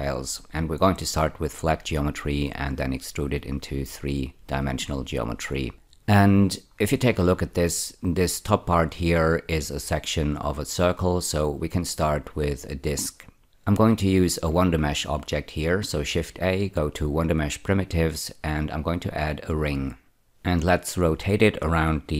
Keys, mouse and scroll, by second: 7.0-8.8 scroll down 1, 14.2 shift+a, 19.4 click, 21.7 r.